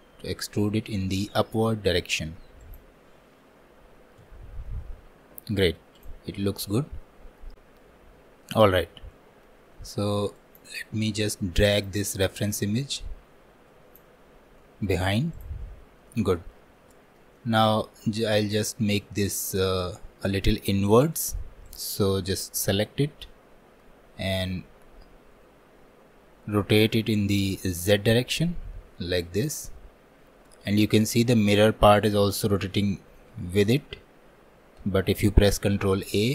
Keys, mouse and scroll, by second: 4.3 Tab, 4.7-6.0 middle drag, 6.0 click, 6.4-10.4 middle drag, 10.4 click, 11.2-11.6 scroll down 2, 11.6 shift+middle click, 12.4-14.3 drag, 14.3 scroll down 1, 14.6 middle click, 15.4 click, 15.7-16.1 scroll up 2, 16.1-18.1 middle drag, 18.1-18.8 scroll up 1, 21.0 shift+middle click, 21.7-22.9 drag, 22.9-28.1 middle drag, 28.1-31.2 drag, 35.9 ctrl+a.